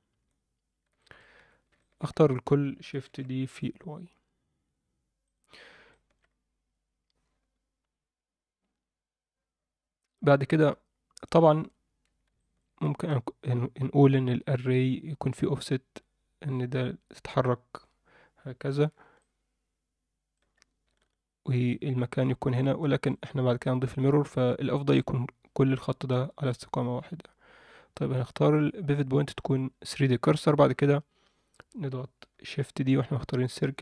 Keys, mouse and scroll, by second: 0.1 Tab, 0.2-0.8 scroll down 2, 1.0 alt+shift+middle click, 1.4 Tab, 1.8 alt+shift+middle click, 2.1 a, 3.0 shift+d, 5.9 alt+shift+middle click, 6.5-8.6 scroll down 1, 11.8-12.3 scroll down 2, 12.4 alt+shift+middle click, 13.7 scroll up 1, 19.2-20.4 drag, 20.3 d, 20.4-21.6 d, 21.6-23.1 drag, 23.1 d, 28.9-29.6 drag.